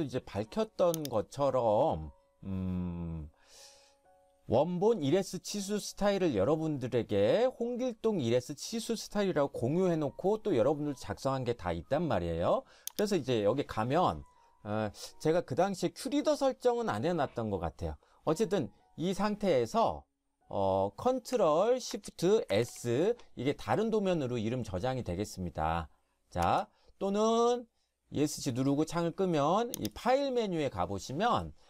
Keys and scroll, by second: 22.5 ctrl+shift+s, 26.4 Escape.